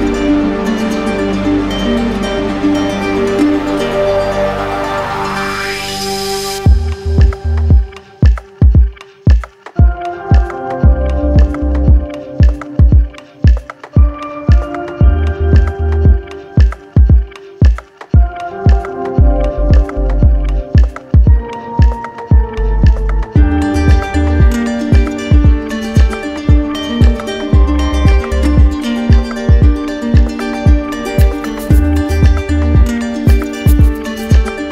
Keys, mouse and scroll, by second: 2.0-3.1 drag, 3.1 right click, 3.5 shift+right click, 4.4 alt+right click, 7.1 alt+right click, 9.5 ctrl+click, 10.0 ctrl+z, 12.6 ctrl+click, 15.0 ctrl+click, 17.0 shift+click, 22.0 click, 25.8 right click, 26.6 ctrl+click, 27.6 right click, 28.2 shift+right click, 29.4 right click, 29.8 q, 31.1-33.5 right drag.